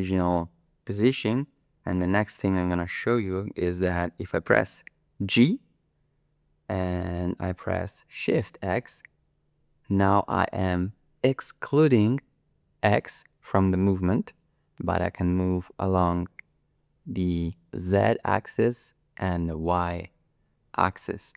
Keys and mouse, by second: 5.4 g, 8.4 shift+x.